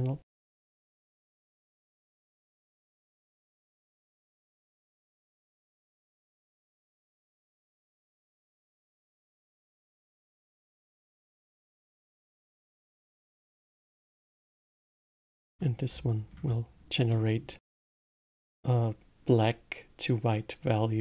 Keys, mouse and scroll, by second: 0.8 KP_Decimal, 1.5-2.1 scroll down 2, 2.1-2.5 scroll down 9, 3.0-3.5 scroll up 7, 3.5 click, 4.3-4.9 middle drag, 4.9-5.7 scroll up 12, 6.8-9.2 drag, 11.2 click, 11.8 scroll up 2, 12.3-13.0 middle drag, 13.0 scroll down 1, 14.0 ctrl+shift+click, 14.6 ctrl+shift+click, 15.2-15.8 middle drag, 15.8-16.2 scroll down 2, 16.2-17.1 scroll up 2, 17.1-17.6 middle drag, 17.6-18.8 scroll down 1.